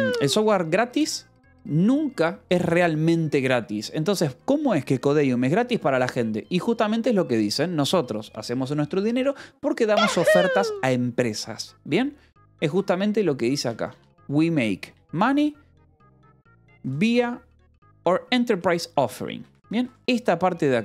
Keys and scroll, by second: 12.6-16.4 typing, 14.8 Return, 19.1-20.0 typing.